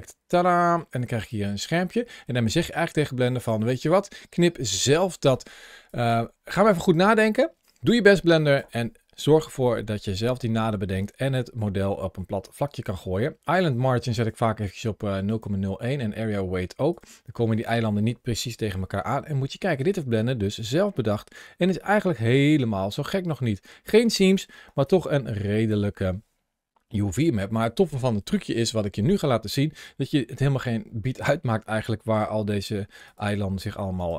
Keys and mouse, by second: 21.0 shift+middle click, 22.1 shift+middle click, 24.5 ctrl+shift+a, 33.4 g, 33.8 right click.